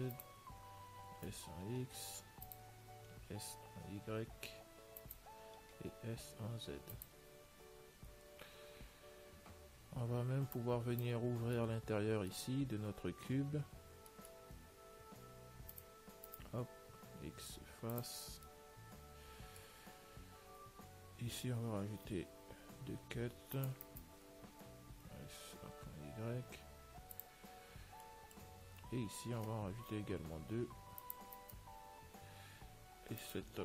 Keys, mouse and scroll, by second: 1.4 s, 9.0-10.8 middle drag, 10.8 click, 11.3-13.7 middle drag, 14.4-16.0 middle drag, 16.0 click, 16.6-18.4 right drag, 17.3 x, 18.7-22.6 middle drag, 22.6 ctrl+r, 25.2 s, 28.0-31.6 middle drag, 30.1 ctrl+r, 33.5-33.6 right drag.